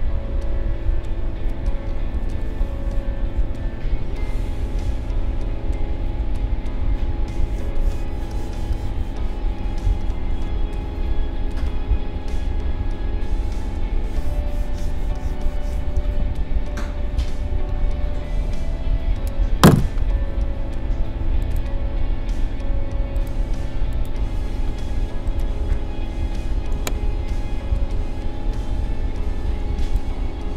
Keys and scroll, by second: 7.6 space, 13.7 space, 16.7 a, 17.7 ctrl+a, 29.7 space.